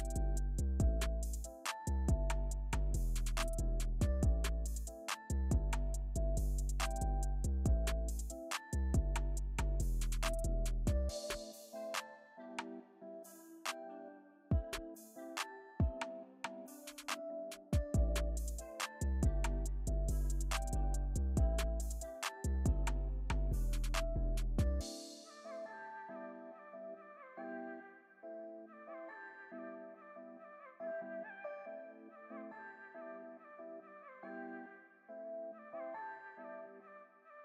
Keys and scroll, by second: 0.4 alt+super+z, 2.9 alt+super+z, 4.8 alt+super+z, 5.5 alt+super+z, 13.9 alt+super+z, 22.7 alt+super+z, 32.5 alt+super+z, 34.1 alt+super+z, 35.4 alt+super+z.